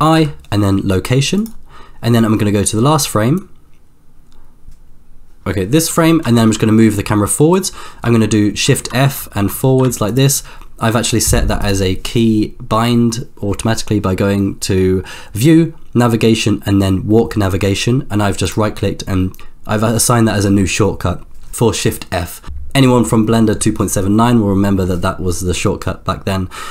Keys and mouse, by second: 0.1 i, 3.4-4.9 drag, 6.4 shift+f, 8.6 shift+f, 11.7-21.5 drag, 25.8-26.7 drag.